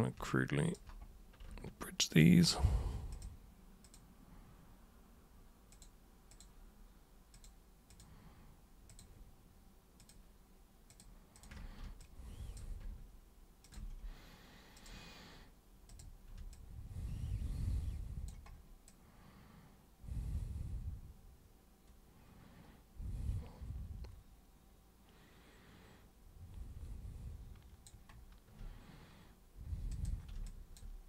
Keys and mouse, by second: 0.3-0.7 alt+super+drag, 2.1 ctrl+shift+super+click, 3.1 ctrl+shift+super+click, 3.8 ctrl+shift+super+click, 5.7 ctrl+shift+super+click, 6.3 ctrl+shift+super+click, 7.3 ctrl+shift+super+click, 7.9 ctrl+shift+super+drag, 8.9 ctrl+shift+super+click, 10.0 ctrl+shift+super+click, 10.9 ctrl+shift+super+click, 11.4 ctrl+shift+super+drag, 12.0 alt+super+click, 13.6 ctrl+shift+super+click, 14.8 super+click, 15.9 super+click, 16.5-18.3 alt+super+drag, 18.9-27.9 alt+super+drag, 29.9 super+click, 30.4 alt+super+click.